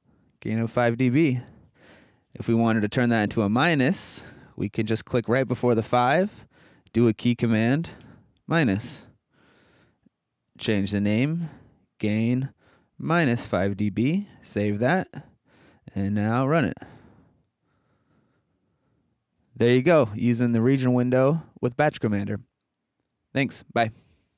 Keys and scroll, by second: 8.0 -, 11.5 alt+Right, 11.7 alt+Left, 13.2 alt+-.